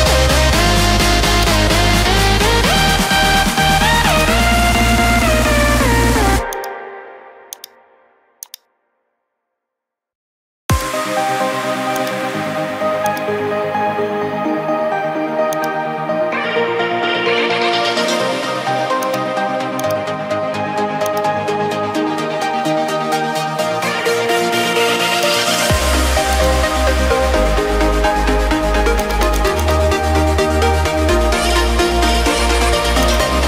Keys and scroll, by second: 31.4-32.2 typing.